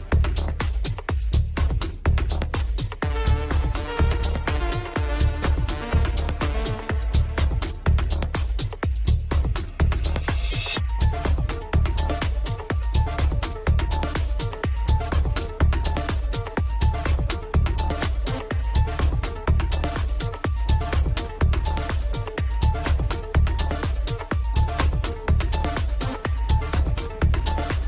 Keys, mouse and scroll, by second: 1.8 scroll down 1, 1.9-2.9 middle drag, 2.9 click, 3.7-4.7 scroll up 2, 4.7 right click, 5.6 s, 6.8 middle click, 7.2 scroll down 1, 7.4 shift+middle click, 7.7-8.1 scroll up 1, 8.1 KP_7, 8.5 scroll down 2, 8.7 click, 10.0 click, 10.6 g, 11.6 shift+middle click, 11.9 scroll up 4, 12.1 shift+middle click, 12.6 g, 13.3 middle click, 14.2 click, 14.4 scroll down 2, 14.5 shift+middle click, 14.8 Tab, 15.1 middle click, 15.4-15.8 scroll up 2, 15.8 r, 16.8 scroll up 2, 16.9 shift+middle click, 17.7 click, 19.0 Tab, 19.1 click, 19.8 ctrl+j, 20.5 Tab, 21.0 ctrl+j, 22.4 click, 22.9-23.3 scroll down 2, 23.8-24.8 scroll down 19, 24.8 shift+click, 26.2 ctrl+j, 27.4 scroll down 1, 27.7-27.8 middle drag.